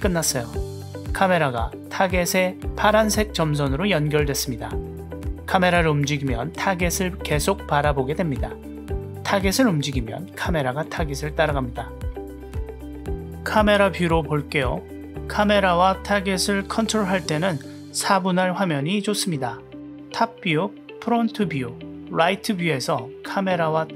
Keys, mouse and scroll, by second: 1.4-3.3 drag, 3.3 g, 9.0-9.5 drag, 9.5 g, 14.8 click, 18.9-19.6 drag, 19.6 g, 21.0-21.4 drag, 21.8 g, 22.9 g.